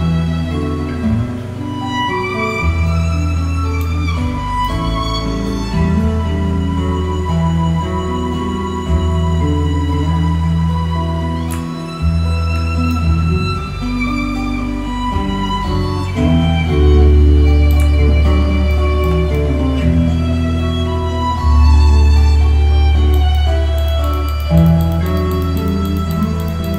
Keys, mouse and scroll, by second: 12.7-13.1 alt+scroll down 1, 13.3 alt+scroll up 1, 13.8 click, 18.9 alt+scroll down 1, 19.2 alt+scroll up 1, 19.5 alt+right click, 20.1 click.